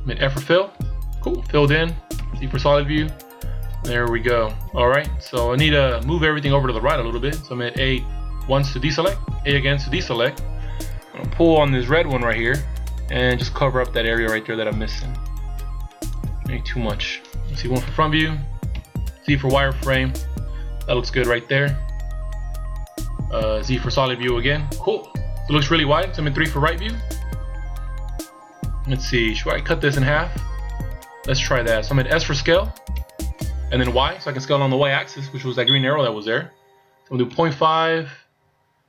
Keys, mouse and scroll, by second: 0.7 f, 2.2 z, 2.7-3.9 scroll down 6, 4.1 scroll down 2, 8.5 a, 9.4 a, 12.3 click, 17.8 KP_1, 18.7 z, 19.3-20.0 scroll up 2, 20.0-20.9 shift+scroll up 3, 23.7 z, 24.1 middle click, 25.2-26.4 scroll down 3, 26.4 KP_3, 27.2 scroll up 2, 32.9 s.